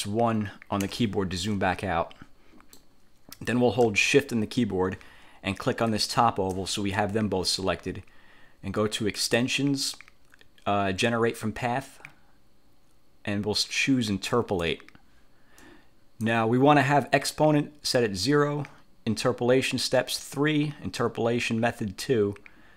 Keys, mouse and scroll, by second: 0.9 1, 1.6-3.1 drag, 6.0 shift+click, 9.3 click, 14.4 click, 15.7 click.